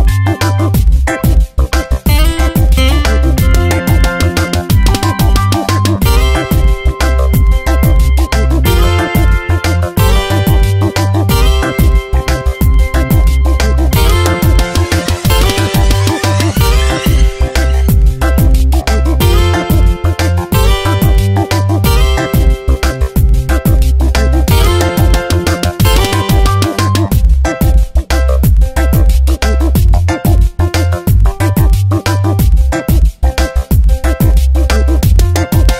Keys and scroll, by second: 0.9 x, 6.3 v, 9.3 ctrl+[, 14.3 space, 16.8 ctrl+z, 21.7 ctrl+z, 26.1 ctrl+z, 27.5 b, 28.9 ctrl+shift+n, 29.3 Return, 32.6 v.